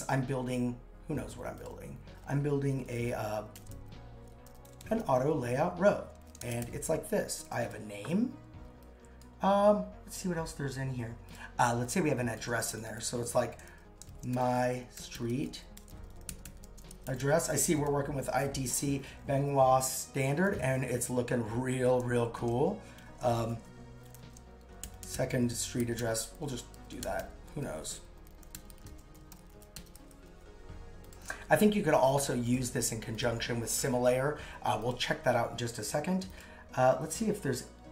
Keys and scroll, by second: 3.5 shift+n, 6.3 shift+n, 14.1 shift+m, 23.0 shift+Return, 24.2 shift+s.